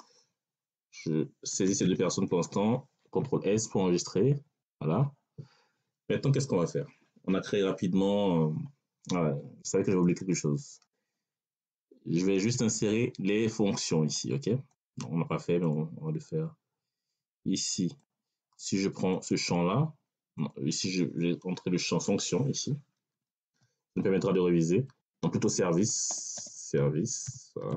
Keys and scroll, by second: 1.4 ctrl+s, 23.3 f, 24.2 BackSpace, 25.8-27.7 typing.